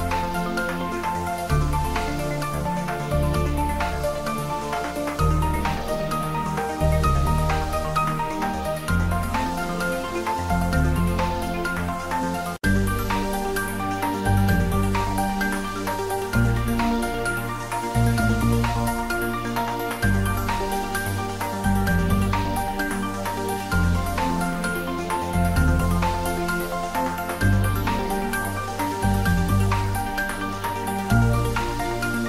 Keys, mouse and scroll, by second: 1.1 click, 1.4 ctrl+z, 1.8 x, 2.0 click, 3.9-5.4 typing, 6.3 click, 6.6 shift+middle click, 7.1 ctrl+middle click, 7.8 r, 11.4 click, 11.8 ctrl+middle click, 12.4-13.5 typing, 14.6 Return, 14.8 r, 15.0 Down, 18.0 Return, 18.2-19.2 typing, 19.8 Return, 20.1 ctrl+s, 20.6 shift+middle click, 21.4 click, 21.5-22.8 typing, 23.2 Left, 24.6 Return, 25.2 shift+middle click, 25.9 click, 26.1-27.3 typing, 27.6 Right, 28.6 Return, 29.0 g, 29.3 z, 30.1 Up, 30.8 x, 31.1 Up.